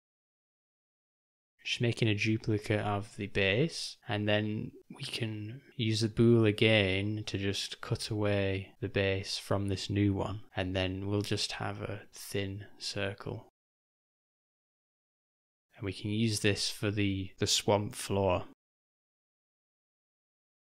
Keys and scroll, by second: 2.6 s, 5.7 g, 12.3 g, 19.4 ctrl+alt+-, 20.6 /.